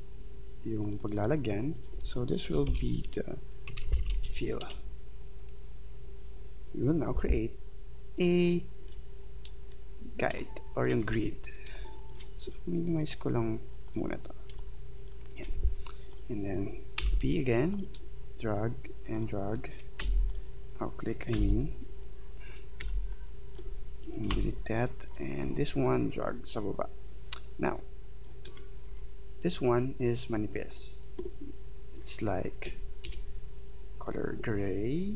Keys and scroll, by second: 2.4 End, 2.7 shift+Home, 4.6 Return, 10.3 space, 17.0 p, 20.0 b, 21.3 v, 24.3 Delete, 33.0 shift+x.